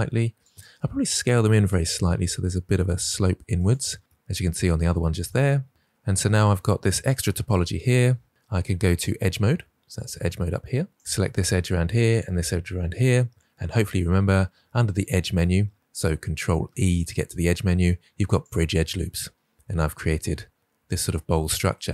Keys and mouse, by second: 0.4 click, 1.2 s, 3.5 click, 5.3 middle click, 9.9 click, 15.0-16.0 drag, 17.0 ctrl+e.